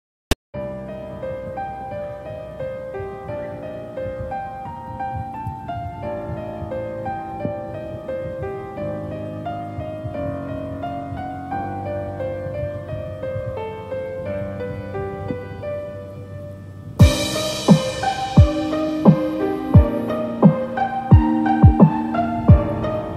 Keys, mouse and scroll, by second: 0.0 middle click, 1.4 middle click, 1.5 scroll down 2, 1.9 middle click, 2.2 shift+middle click, 2.3 shift+middle click, 2.4-2.8 scroll up 5, 2.8 middle click, 3.9 scroll down 4, 4.2 shift+middle click, 4.5 middle click, 5.0-5.4 scroll up 5, 5.4 shift+middle click, 5.6 middle click, 6.0 Tab, 6.8 Tab, 7.1 Tab, 7.5 middle click, 8.1 shift+middle click, 8.4 middle click, 8.8 scroll up 6, 9.2 shift+middle click, 9.6 middle click, 11.4 scroll down 2, 12.1 3, 12.3 click, 12.6 scroll down 3, 12.9 middle click, 13.8 scroll up 3, 17.6 scroll down 1, 17.8 middle click, 18.5 scroll up 3, 19.9 alt+shift+click, 20.7 alt+shift+click, 21.5 alt+shift+click.